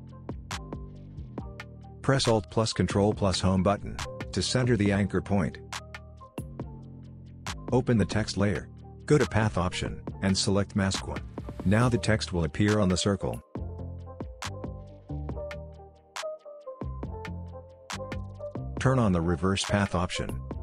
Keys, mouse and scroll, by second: 2.5 ctrl+alt+End, 2.9 ctrl+alt+Home, 4.8 click, 19.7 click.